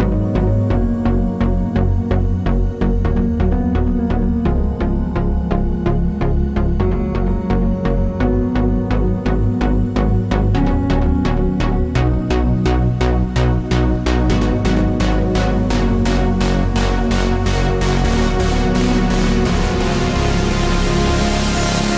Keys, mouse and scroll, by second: 1.6 shift+d, 2.1 Tab, 2.4 click, 2.6 Tab, 3.0 s, 4.0 click, 4.1 2, 4.2 click, 4.4 g, 5.2 click, 6.2 3, 6.3 click, 6.4 e, 7.1 click, 7.4 1, 7.5 2, 8.8 click, 9.1 g, 9.5 click, 10.0 g, 11.0 3, 11.0 click, 11.3 i, 11.7 click, 12.1 scroll, 12.3 middle click, 12.4 click, 12.6-17.7 shift+middle drag, 14.1 scroll down 2, 17.5 Tab, 17.7 click, 18.2-21.9 middle drag, 19.5 KP_7.